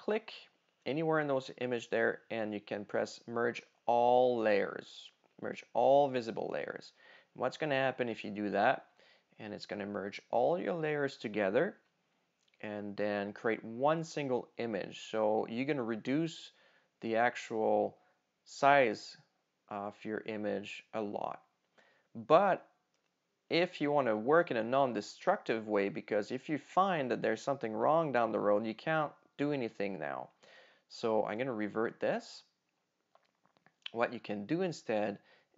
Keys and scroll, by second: 31.1 super+z.